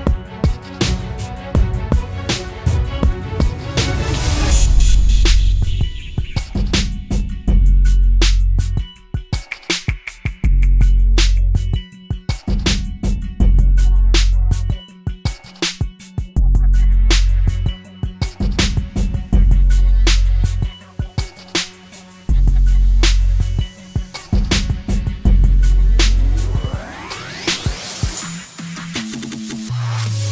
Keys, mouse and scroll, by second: 13.0 alt+click, 19.5 right click, 22.0 typing, 23.2-24.6 typing, 24.0 double click, 26.0 double click, 26.5 typing.